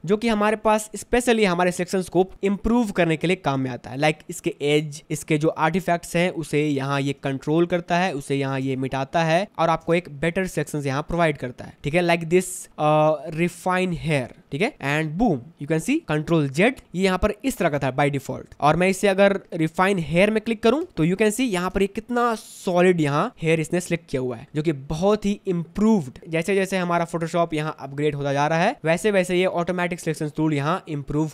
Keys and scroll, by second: 7.4 ctrl+alt+space, 7.9 ctrl+alt+space, 8.8 ctrl+space, 9.5 ctrl+alt+space, 16.6 ctrl+z, 17.9 space, 20.9 ctrl+z, 21.9 space.